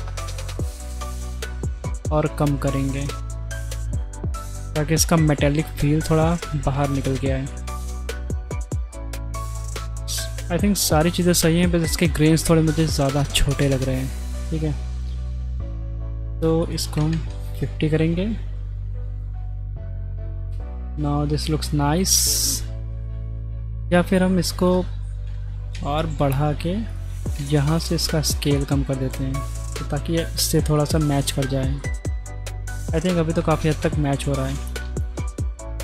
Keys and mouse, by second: 8.3 click, 11.5 middle click, 13.6 middle click, 14.5 middle click, 15.8 middle click, 16.7 click, 22.5-23.6 middle drag, 24.7-25.9 drag, 25.4 KP_0, 26.9-28.0 drag, 30.3 middle click, 30.9 middle drag, 31.9-32.9 middle drag, 33.7 middle click.